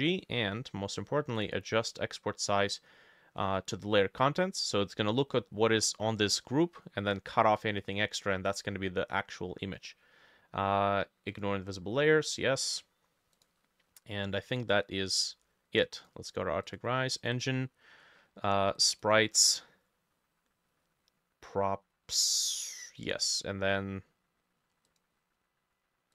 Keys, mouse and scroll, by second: 17.4-21.0 drag, 22.5-24.5 drag.